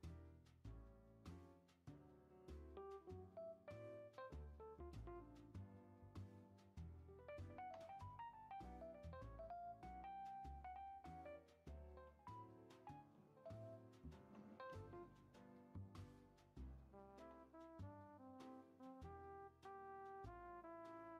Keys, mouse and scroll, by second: 1.6 scroll up 1, 1.6-5.7 middle drag, 5.7 scroll down 2, 5.9 scroll up 1, 6.0 middle click, 6.8 click, 7.5 ctrl+a, 9.9 ctrl+a, 11.4 middle click, 11.8 ctrl+a, 12.7 middle click, 13.2 ctrl+a, 14.4 ctrl+a, 15.6 click, 16.1 click, 17.0 ctrl+a, 18.3 scroll up 1, 18.3-19.4 middle drag, 19.4 scroll up 2, 19.8-21.1 shift+middle drag.